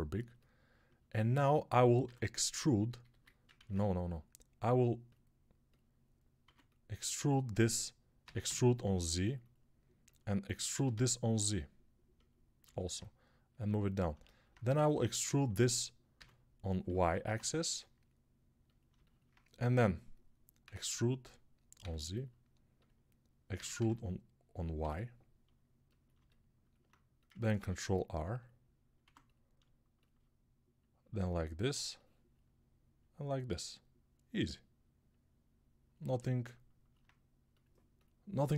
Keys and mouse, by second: 1.9 e, 3.4 ctrl+z, 6.3 2, 8.1 e, 10.6 e, 13.6-16.0 drag, 16.0-32.0 middle drag, 16.0 e, 20.5 e, 23.4 e, 27.4 ctrl+r, 28.9 1, 32.0-38.5 drag.